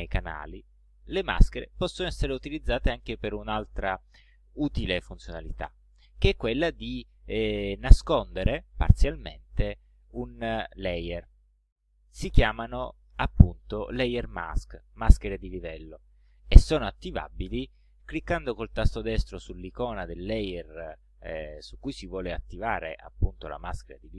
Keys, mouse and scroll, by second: 0.2 click, 4.9 click.